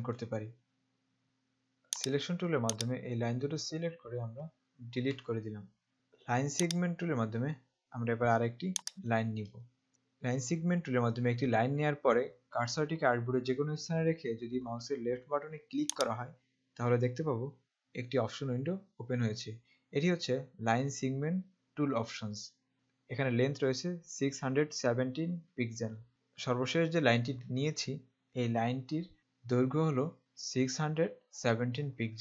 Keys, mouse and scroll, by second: 1.2 click, 5.2 Delete, 5.9 click, 6.7 click, 8.7 click, 16.1 click.